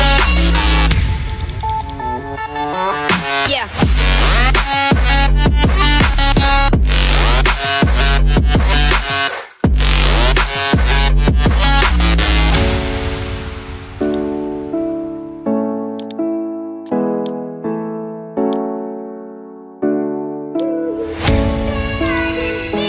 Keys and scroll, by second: 4.7 ctrl+d.